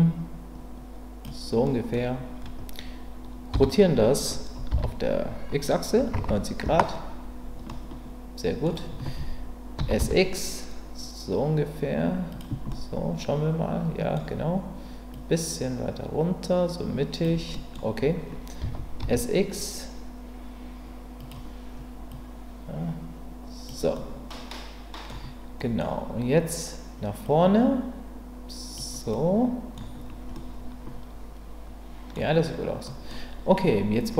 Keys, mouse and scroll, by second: 1.6-3.5 middle drag, 3.5 r, 4.7 x, 5.9 KP_9, 6.6 KP_Enter, 7.7-8.6 middle drag, 10.0 s, 10.0 x, 12.3 click, 12.7-14.1 middle drag, 14.1 scroll down 2, 15.1-17.2 drag, 17.5 scroll up 2, 18.6 s, 19.0 z, 21.2 click, 22.1-23.7 drag, 23.9-25.1 middle drag, 25.6 scroll up 2, 25.8-27.2 middle drag, 27.2-28.7 drag, 29.1-29.7 middle drag, 30.3-32.1 middle drag, 32.9 scroll up 1, 33.1-34.1 middle drag.